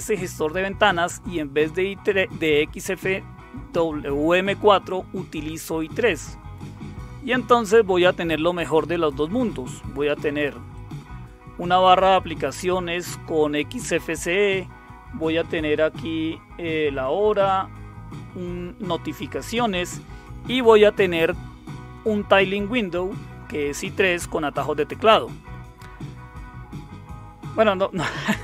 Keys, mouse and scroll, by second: 7.6 click, 10.7 click, 19.6 click, 27.5 click.